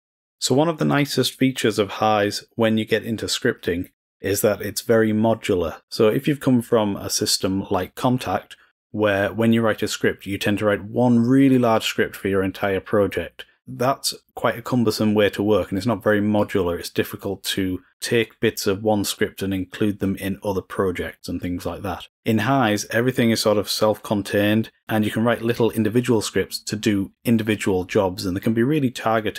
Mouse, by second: 0.8-1.3 drag, 1.6 click, 3.2 click.